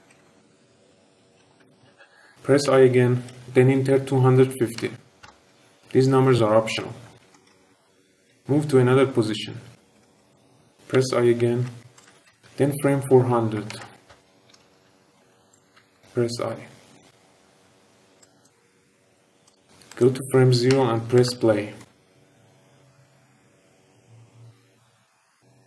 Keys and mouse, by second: 0.0-2.6 typing, 3.4 click, 7.1-10.9 typing, 11.9-14.1 drag, 13.6-15.7 typing, 18.2-19.2 drag, 19.8-21.3 drag, 21.8 space.